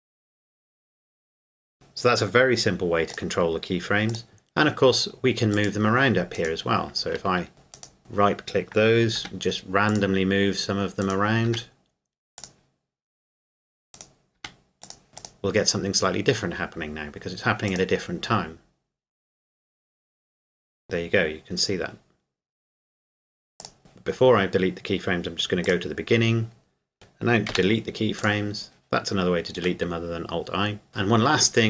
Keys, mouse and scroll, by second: 3.1 click, 6.3 right click, 7.7 right click, 9.1 g, 9.9 click, 11.0 right click, 11.5 g, 12.4 click, 13.9 right click, 14.3 g, 14.8 click, 17.7 click, 23.6 click, 23.8 ctrl+z, 25.6 click, 27.5 Delete, 28.2 click, 29.9 middle click.